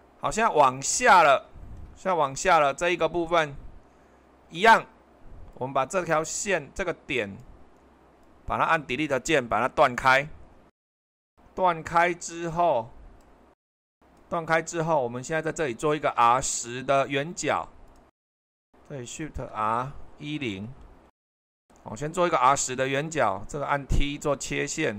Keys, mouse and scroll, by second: 0.0 super+2, 9.9 Delete, 13.9-15.2 drag, 16.9-19.5 drag, 19.5 r, 20.5 1, 21.1 0, 21.3 Return.